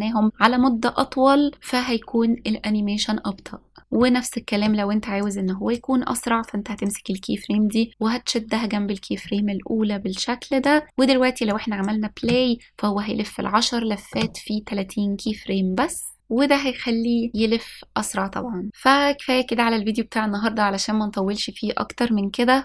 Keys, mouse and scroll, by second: 6.8-7.5 drag, 8.0 click, 8.7 click, 8.9-11.9 drag, 10.7 s, 13.1 click, 13.8 space, 15.7 space.